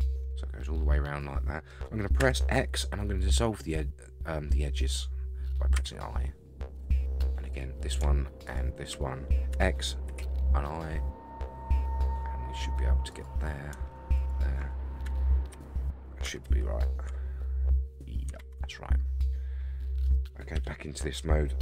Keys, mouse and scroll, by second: 2.2 x, 7.5 click, 8.4 shift+click, 9.5 x, 10.6-12.2 middle drag, 13.1 click, 14.1 shift+click, 15.0 x, 16.4 shift+z, 17.1-18.3 middle drag, 18.4 shift+z, 18.7-20.0 middle drag, 20.5 KP_3.